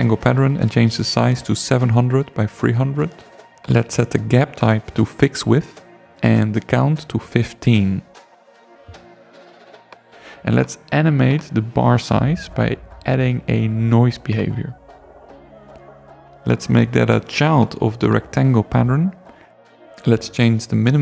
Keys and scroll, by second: 0.0 0, 1.9 3, 2.3 0, 7.6 i, 8.0 5, 20.2 0.